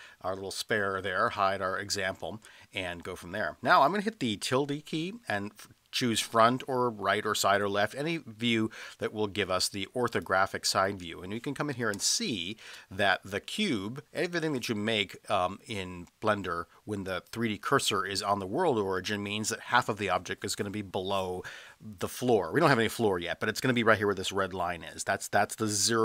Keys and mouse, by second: 0.6 click, 12.0 space.